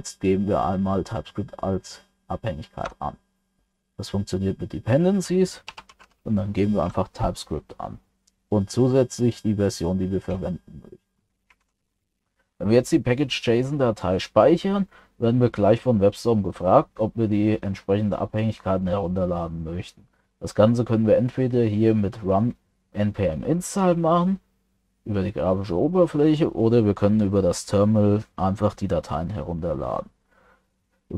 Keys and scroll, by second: 11.6 ctrl+s.